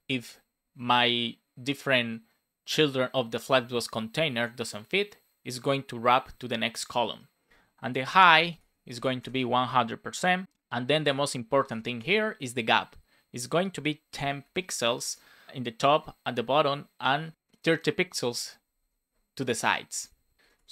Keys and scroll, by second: 0.0 Return, 7.8-9.2 typing, 10.4 Return, 11.4 shift+;, 11.6 space, 11.8 shift+1, 14.9 space, 18.2 Right, 18.3 Down, 18.7 Up, 19.9 super+s, 20.4 Return.